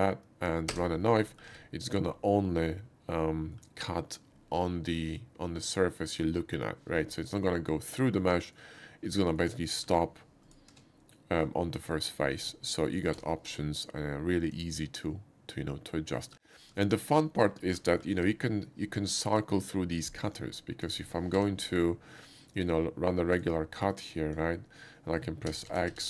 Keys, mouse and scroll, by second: 0.7 space, 1.2 middle click, 1.5 Tab, 1.9 click, 2.4-3.5 middle drag, 7.5-8.5 middle drag, 9.1 middle click, 9.9 e, 10.5 click, 10.7 Tab, 13.1 d, 14.4 click, 16.2 middle click, 16.8 shift+middle click, 17.1 shift+middle click, 17.6 shift+middle click, 17.9 shift+middle click, 18.1 d, 20.3 click, 21.4 d, 22.6-24.3 drag, 25.5 x, 25.7 x.